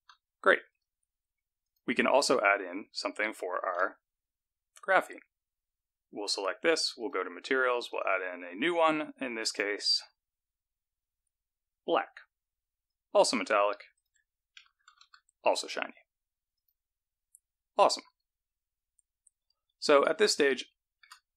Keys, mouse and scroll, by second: 0.0 z, 1.8 click, 3.9 z, 7.4 click, 8.0 click, 9.7 click, 13.0 click, 14.2 click, 16.8 click, 17.4-18.3 scroll down 3, 18.3 click, 20.6 shift+middle click.